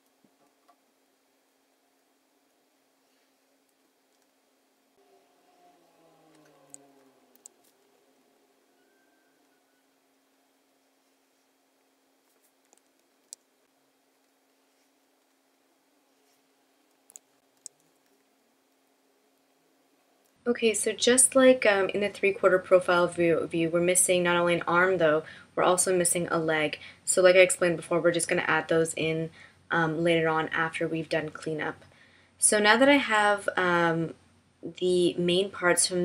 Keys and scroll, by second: 7.3 super+F9, 13.2 super+F9, 17.5 super+F9.